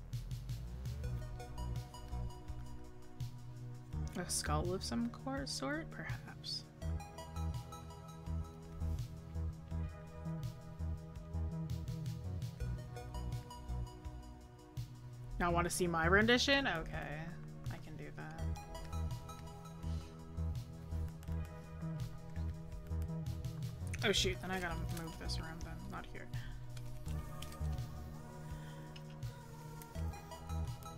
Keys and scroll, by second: 18.6 scroll, 21.1 scroll down 1, 21.9 scroll up 1, 22.9 scroll down 1.